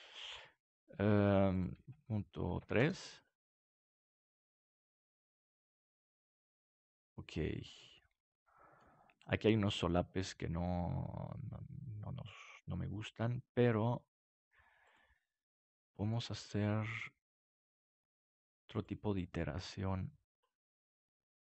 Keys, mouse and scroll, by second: 3.5-6.0 middle drag, 12.6-15.0 middle drag, 15.0-16.6 drag, 15.7-17.8 middle drag, 17.8-20.3 drag, 20.8-21.4 middle drag.